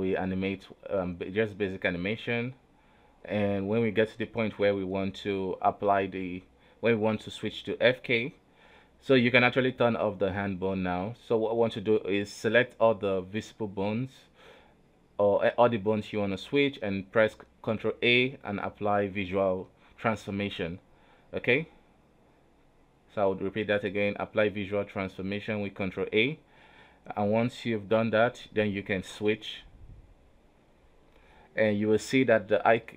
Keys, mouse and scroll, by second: 0.2 right click, 0.5 g, 1.4 r, 2.2 a, 2.8 i, 3.7-6.8 drag, 7.9-11.0 right drag, 11.0 click, 12.4 right click, 13.9 scroll up 2, 14.6 shift+middle click, 15.3 scroll down 1, 15.4 scroll up 1, 15.9 right click, 16.3 a, 17.6 right click, 18.0 shift+right click, 18.4-20.3 shift+right drag, 20.3 ctrl+a, 22.8 ctrl+z, 23.5 Down, 24.5 Right, 26.4 ctrl+a, 28.4-28.9 scroll down 3, 28.9 i, 29.6 a, 30.0 i, 31.1 right click, 31.8 alt+g, 32.6 alt+r.